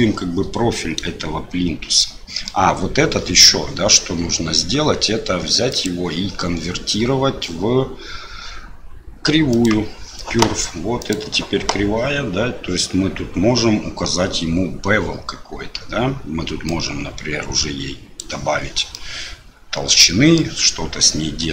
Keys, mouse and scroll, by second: 2.1 middle click, 5.8-9.6 drag, 11.1-12.9 drag, 16.7-18.2 drag, 18.9-20.3 middle drag.